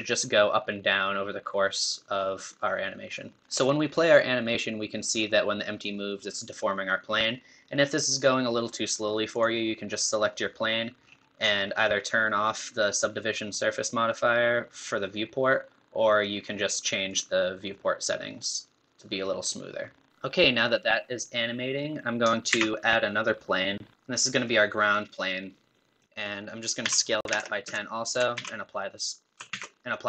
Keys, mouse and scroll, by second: 9.5 click, 11.3-14.2 scroll up 5, 17.3 click, 20.1 shift+middle click, 21.1-22.5 middle drag, 22.5 shift+a, 24.4-26.8 middle drag, 26.8 s, 29.5 ctrl+a.